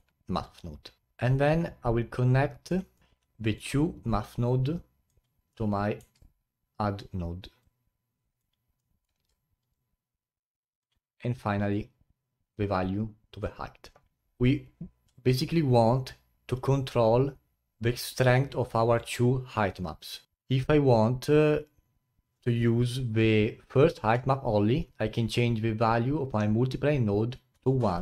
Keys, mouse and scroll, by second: 0.2-0.5 scroll down 5, 1.0 click, 1.0 scroll up 3, 2.9 middle click, 3.6 click, 8.4-14.2 drag, 27.8 click.